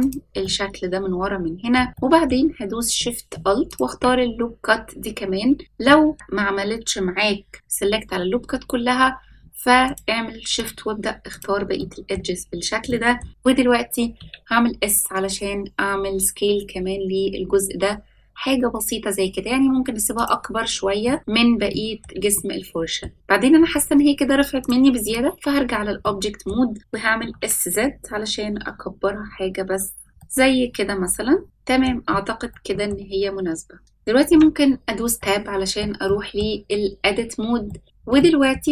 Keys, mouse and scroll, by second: 0.4-1.7 middle drag, 1.9 middle click, 3.6 alt+shift+click, 5.8 middle click, 9.8 shift+click, 10.5 shift+click, 11.2 shift+click, 11.7 middle click, 12.3-12.8 scroll down 2, 12.8 middle click, 13.3-14.1 scroll up 1, 14.1 s, 21.0 middle click, 21.6 shift+middle click, 22.3 middle click, 24.5-26.0 drag, 26.0 middle click, 27.1 s, 30.1-31.8 middle drag, 32.5-32.8 middle drag, 33.2-33.8 scroll up 1, 33.8 middle click, 34.2 Tab, 35.1 shift+middle click, 36.0 middle click, 36.6-37.6 scroll up 2, 37.6 middle click, 37.8 click, 37.8-38.1 scroll up 1, 38.1 middle click.